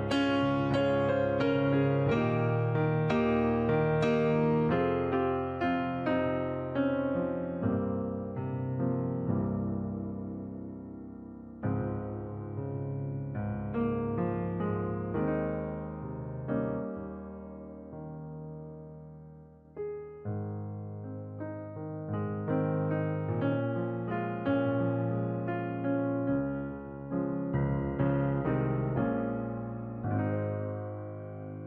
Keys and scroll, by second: 13.3 ctrl+t, 20.7 ctrl+i.